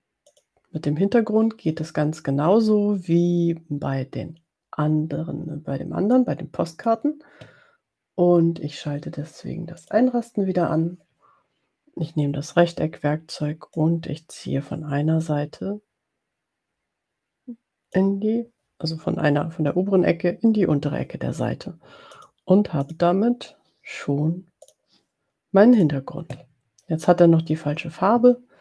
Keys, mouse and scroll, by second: 0.4 click, 6.5 click, 9.7 click, 13.8-18.2 drag, 22.1 click, 23.1 click, 24.7 click, 25.7 click.